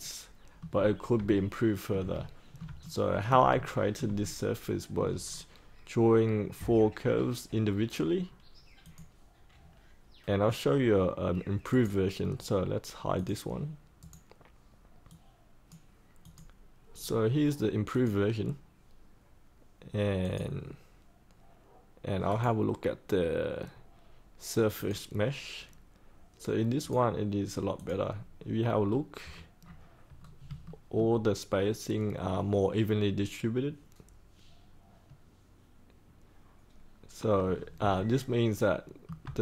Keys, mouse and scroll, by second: 1.2 alt+middle click, 2.1 shift+middle click, 2.8 alt+middle click, 3.5 shift+middle click, 4.2 alt+middle click, 5.2-8.8 scroll down 1, 8.8 click, 11.6 right click, 13.1 click, 13.9 right click, 15.0 click, 22.2 right click, 24.7 click, 28.7-29.5 scroll down 1, 30.1 scroll up 1, 30.6 shift+middle click, 37.4 scroll up 1, 37.9 alt+middle click.